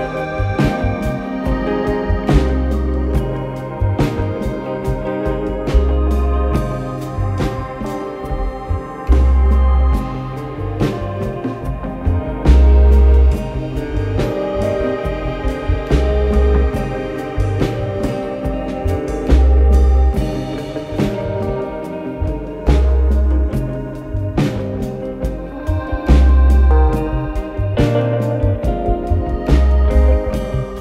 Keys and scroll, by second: 0.2-1.1 typing, 1.6 F1, 3.3 F1, 3.4 F2, 4.4 4, 4.7 1, 10.8 F1, 10.9 F2, 12.7 ctrl+z, 17.3-18.2 typing, 20.2 3, 20.6 F1, 21.9 F1, 22.1 F2, 23.9 ], 27.4 f, 29.9 ].